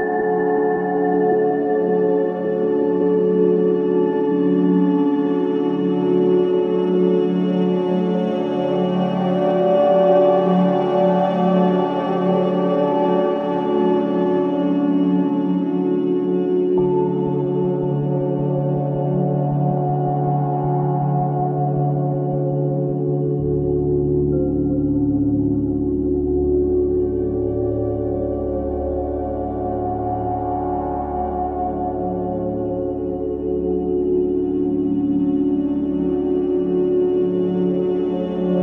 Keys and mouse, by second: 2.8 typing, 3.9-4.4 typing, 5.2 click, 6.5-7.8 alt+drag, 8.2-9.6 alt+drag, 10.1 typing, 10.6 ctrl+alt+click, 10.9 ctrl+alt+click, 11.6 click, 15.0 ctrl+a, 15.8 click, 17.2-20.6 ctrl+alt+drag, 20.5-24.8 typing, 26.1-27.5 typing, 27.6 Escape, 29.0-31.6 typing, 32.1-32.9 drag, 33.6 typing, 34.2-34.7 ctrl+alt+drag, 35.3-36.0 alt+drag, 36.3 ctrl+alt+click, 37.8 alt+click.